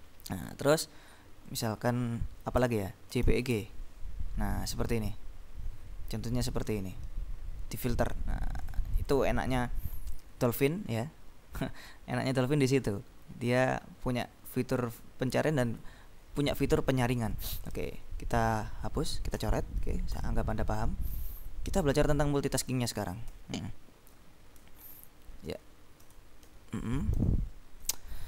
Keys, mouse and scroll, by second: 0.3-1.4 scroll up 2, 1.6 click, 2.7 ctrl+BackSpace, 3.2 ctrl+j, 3.3 ctrl+p, 3.5 ctrl+e, 3.7 ctrl+g, 8.8-9.7 scroll up 2, 14.5-16.3 drag, 17.8 ctrl+b, 19.5 ctrl+s, 20.2 End, 20.7 Down, 21.4 ctrl+shift+Left, 23.5 Right, 24.9 Right, 25.6 Left, 26.6 ctrl+b, 27.3 s.